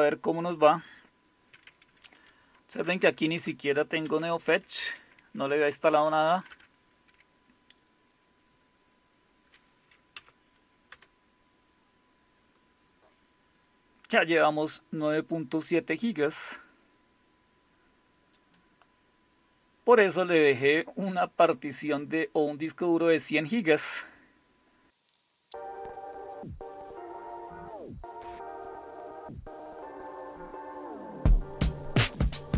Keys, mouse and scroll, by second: 1.4 Tab, 1.4 typing, 2.9-6.0 typing, 10.9 Return, 25.9-26.3 scroll down 1, 26.3 click, 26.4 Up, 26.4 Return, 27.9 Up, 27.9 Return, 28.9 Up, 28.9 Return.